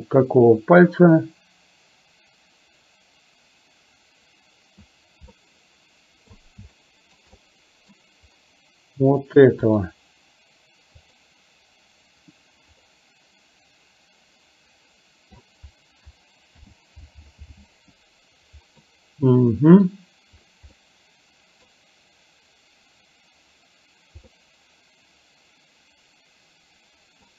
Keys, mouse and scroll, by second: 5.5 middle click, 6.9 shift+middle click, 7.4 middle click, 11.1 click, 13.0-15.4 middle drag, 16.7 alt+g, 17.5 alt+r, 19.0-20.0 middle drag, 20.7-21.7 middle drag, 24.5-27.3 middle drag.